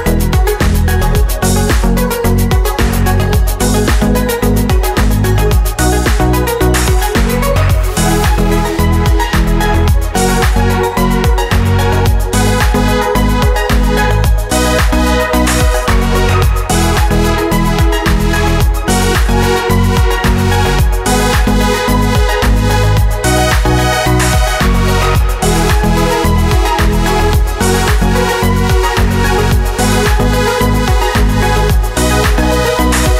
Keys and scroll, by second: 15.8 1, 16.2 Return.